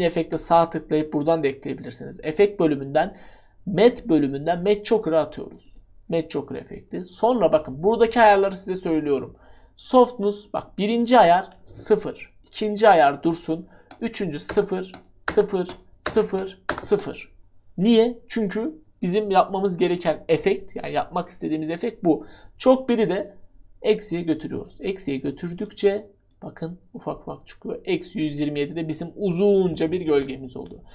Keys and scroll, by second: 11.9 0, 14.5-16.7 typing.